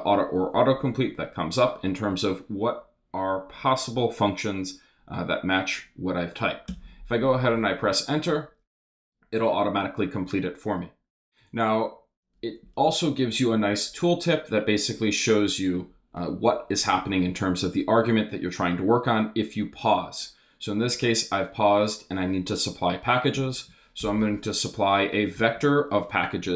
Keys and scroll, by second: 6.7 Return, 23.3 c, 24.0 shift+9, 25.3 shift+'.